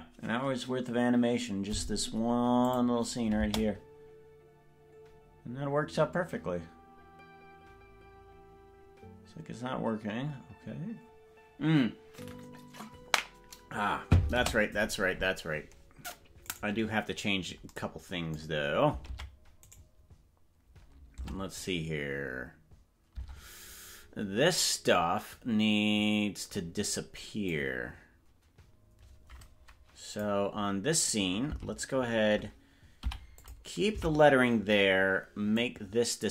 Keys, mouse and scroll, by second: 2.7 click, 3.4 space, 14.6 space, 16.8 right click, 19.2 ctrl+Tab, 20.0 right click, 21.2 Tab, 23.4 Tab, 27.5-30.3 drag, 31.6 Left, 33.0 i, 34.0 Right, 35.5 click.